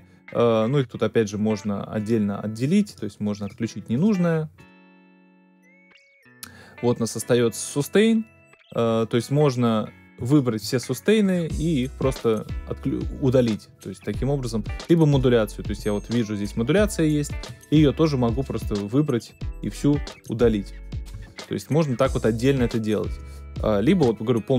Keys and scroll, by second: 21.1 shift+BackSpace, 24.0 BackSpace.